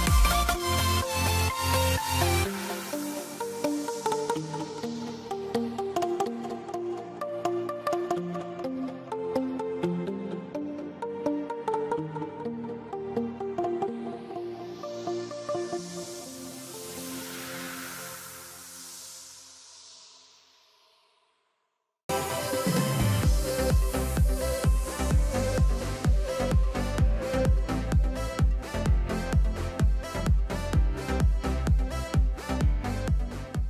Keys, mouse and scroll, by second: 9.0 click, 10.9 middle click, 12.0 click, 13.6 ctrl+right click, 14.2 scroll up 1, 15.4 click, 18.2 F4, 20.2 click.